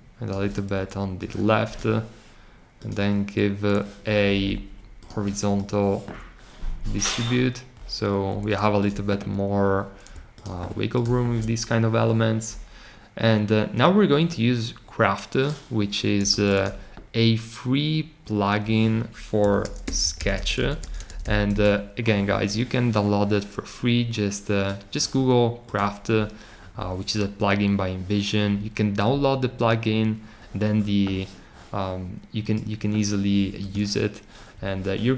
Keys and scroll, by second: 19.1-21.5 typing.